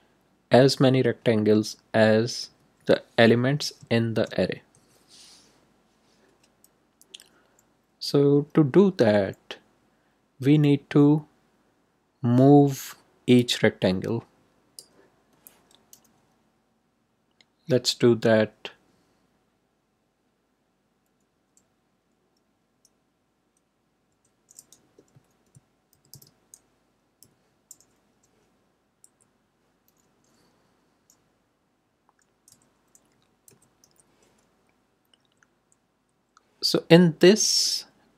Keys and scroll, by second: 24.0-26.6 typing, 29.0 Left, 32.4 d, 33.4 ,, 33.8 i, 35.1 Right.